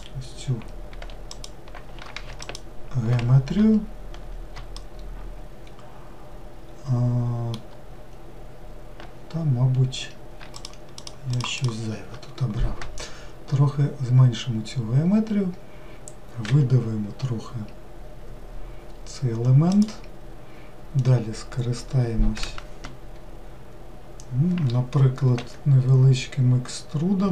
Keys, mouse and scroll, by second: 1.3-2.5 ctrl+shift+drag, 4.8-7.9 shift+middle drag, 10.5 shift+click, 11.0 shift+click, 11.6 shift+click.